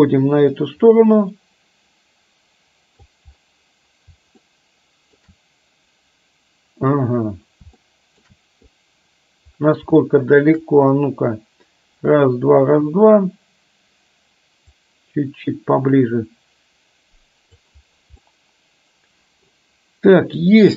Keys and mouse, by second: 4.5-5.3 shift+middle drag, 7.9-8.3 shift+middle drag, 10.1-10.5 shift+middle drag, 14.9-17.8 drag, 18.3-19.5 middle drag.